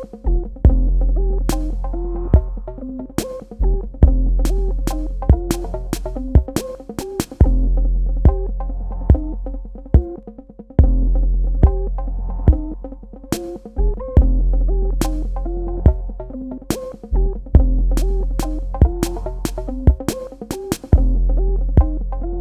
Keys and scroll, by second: 4.9 space, 10.6 space, 12.4 space, 15.6 shift+Num_Lock, 16.8 space.